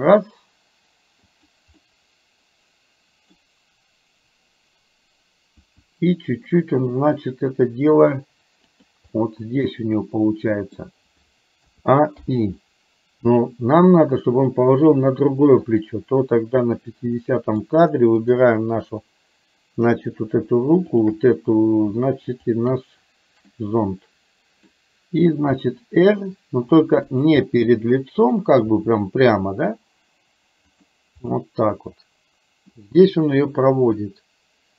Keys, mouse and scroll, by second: 1.9-3.4 middle drag, 5.6 r, 9.1-10.9 middle drag, 11.7 a, 12.2 i, 15.7 click, 17.2 middle click, 18.2 click, 21.1 shift+click, 23.6-24.9 middle drag, 25.6 r, 27.5 middle click, 28.7 r, 31.5-32.7 middle drag.